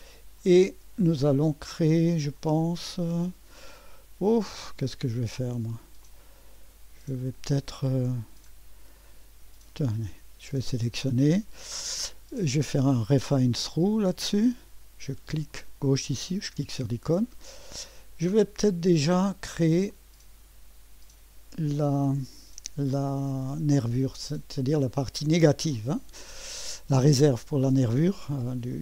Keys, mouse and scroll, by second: 0.7-1.3 scroll down 1, 1.3-2.3 drag, 2.9-3.4 scroll up 1, 3.4-3.9 scroll up 1, 6.0-7.4 drag, 8.2-8.8 scroll down 1, 10.5-12.4 drag, 12.9-18.5 drag, 18.5 middle click, 19.9-21.4 drag, 23.1-24.2 drag, 25.7 click.